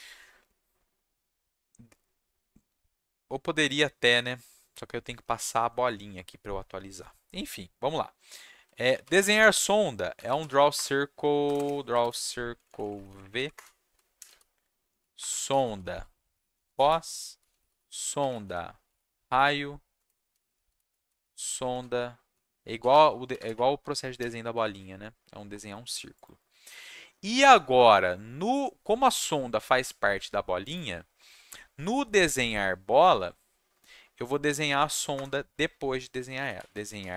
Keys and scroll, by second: 8.4-10.1 typing, 10.7 Return, 12.0 ctrl+space, 12.5 Down, 12.6 Down, 12.8 Down, 12.9 Down, 13.0 Down, 13.2 Down, 13.3 Down, 14.1-24.1 typing, 24.7 ctrl+shift+s, 32.0 =, 35.1 Return, 35.8-37.1 typing.